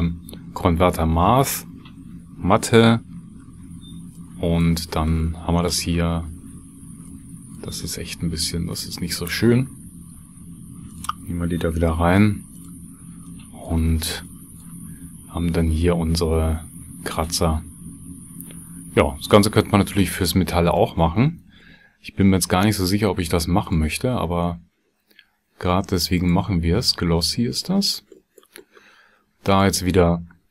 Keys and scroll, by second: 3.3 ctrl+x, 11.9 shift+d.